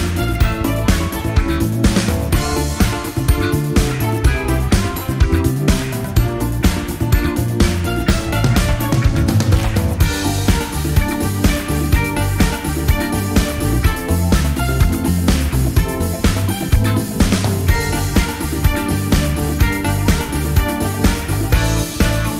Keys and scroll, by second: 0.9 F1, 1.5 typing, 9.1 shift+F6.